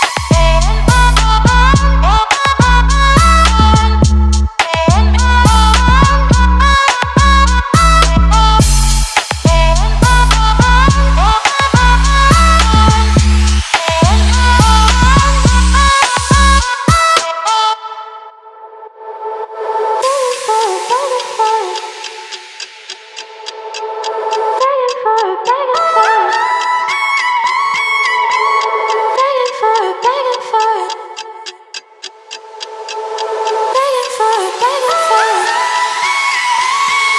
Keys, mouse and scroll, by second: 2.3 right click, 4.0 click, 6.3-9.1 shift+drag, 10.2-19.9 drag, 24.3-37.1 alt+shift+drag.